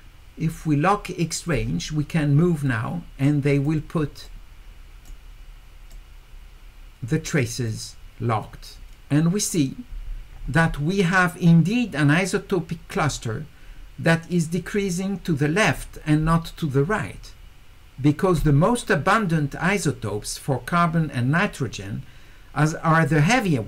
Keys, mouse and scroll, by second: 1.5 click, 2.7 click, 4.2 right click, 5.9-7.7 right drag, 8.4-9.5 drag.